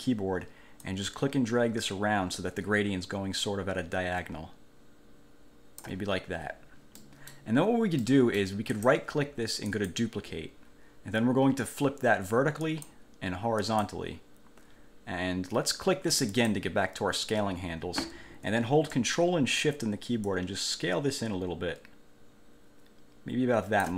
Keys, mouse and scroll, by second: 1.0-6.2 ctrl+drag, 7.1 middle click, 8.1 middle click, 8.9 right click, 9.9 click, 12.8 click, 13.7 click, 16.5 click, 20.5-23.9 ctrl+shift+drag.